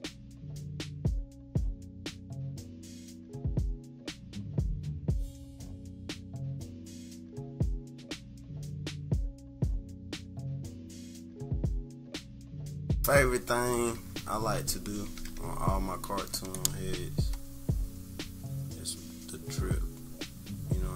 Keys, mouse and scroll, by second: 0.1 click, 5.5 click, 7.5 click, 9.9 -, 10.1 scroll down 1, 10.7 click, 10.9 -, 11.1 click, 11.3 scroll down 1, 11.4 click, 11.9 click, 14.6 -, 15.0 =, 15.3 =, 15.6-16.4 scroll down 3, 18.8 click.